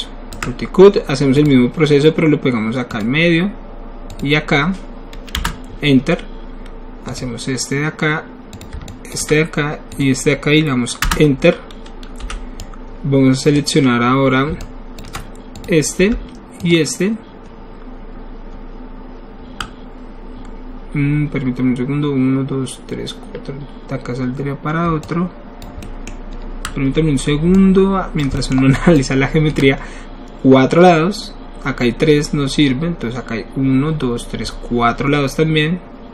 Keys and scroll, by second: 5.4 Return, 11.0 Return, 12.1 w.